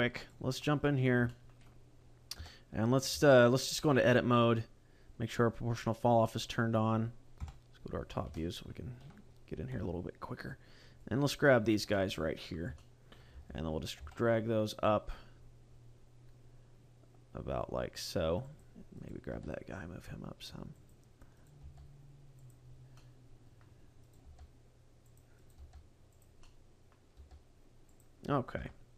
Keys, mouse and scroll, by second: 0.2 right click, 0.5 middle click, 1.2 shift+middle click, 1.6 scroll up 2, 2.4 Tab, 3.1 a, 5.9-6.4 scroll down 2, 6.2 middle click, 7.3 KP_7, 7.9-8.2 scroll down 2, 8.3 shift+middle click, 9.1-9.6 scroll up 4, 9.6 c, 11.6 right click, 11.9 middle click, 12.8 shift+middle click, 13.4 g, 18.6 click, 19.0 right click, 19.2 g, 20.8 click, 21.4 right click, 21.6 g, 22.6 click, 22.8 scroll down 1, 23.0 middle click, 24.0 right click, 24.2 g, 25.2 click, 25.4 right click, 25.6 g, 26.2 click, 26.4 middle click, 27.1 g, 28.0 click, 28.5 KP_0.